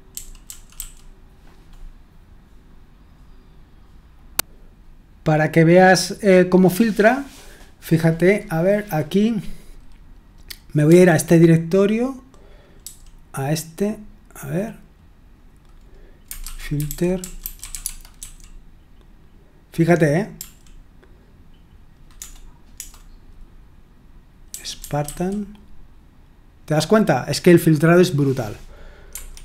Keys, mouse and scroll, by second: 0.1-0.7 typing, 10.8 typing, 12.8 typing, 16.5-18.6 typing, 20.3 l, 22.2-22.7 typing, 24.2-25.5 typing, 29.1 Escape.